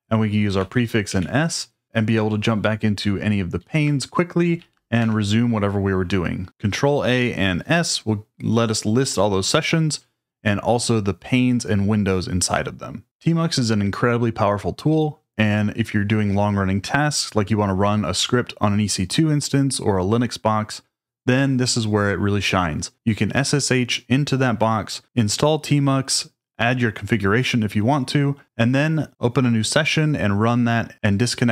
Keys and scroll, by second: 0.6 ctrl+a, 1.1 s, 3.6 Down, 4.6 Down, 5.0 Return.